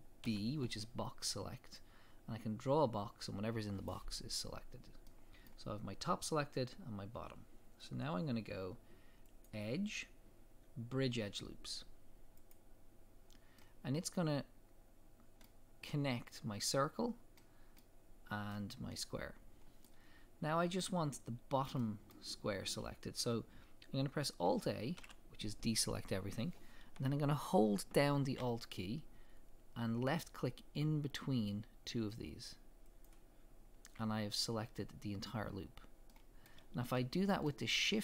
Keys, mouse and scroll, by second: 0.2 b, 5.1 middle click, 6.2-9.3 middle drag, 9.3-13.6 drag, 13.6-25.0 middle drag, 25.0 alt+a, 32.7 middle click, 32.9 alt+click, 36.1-38.0 middle drag.